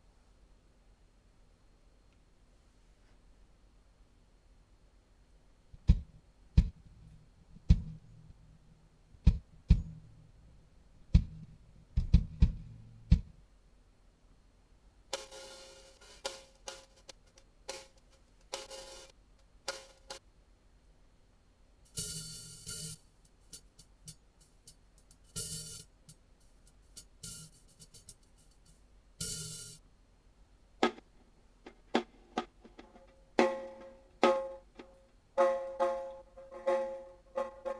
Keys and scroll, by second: 2.1 typing, 5.2 w, 5.7 space, 13.7 space, 14.9 w, 20.1 space, 21.7 w, 29.8 space, 30.7 w.